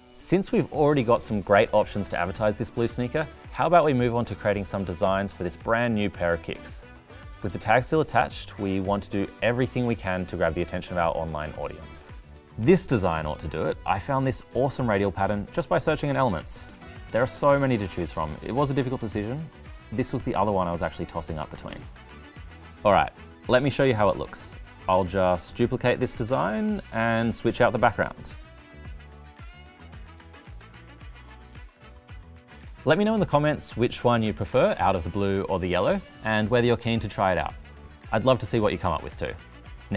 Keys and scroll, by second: 26.9 Delete.